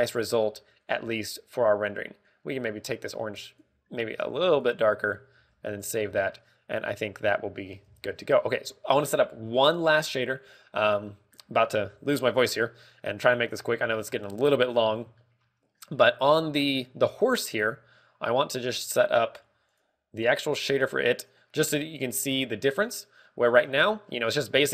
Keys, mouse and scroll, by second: 1.7 click, 6.3 ctrl+w, 7.0-7.4 scroll down 3, 7.3 middle click, 7.9 scroll up 1, 8.6 scroll up 1, 8.8 KP_0, 9.3 scroll up 2, 9.3 KP_0, 9.5 KP_0, 9.9 KP_0, 14.4 click, 14.7-15.1 scroll down 5, 15.1 shift+middle click, 16.2 shift+middle click, 17.9 shift+middle click, 17.9 right click, 19.5 click.